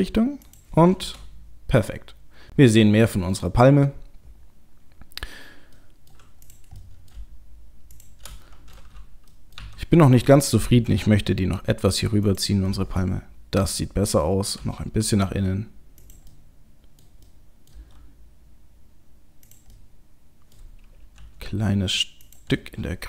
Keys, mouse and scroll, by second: 1.0 KP_0, 5.1-5.8 scroll down 1, 5.8 middle click, 5.8-6.5 scroll down 1, 6.5 click, 6.8 middle click, 7.9 shift+click, 8.4 middle click, 9.3 middle click, 9.6 KP_7, 10.9 r, 12.7 middle click, 14.1 middle click, 14.6 g, 16.3 middle click, 17.3 middle click, 17.7 middle click, 17.7 g, 19.7 middle click, 20.4 middle click, 21.2 s, 22.5 middle click.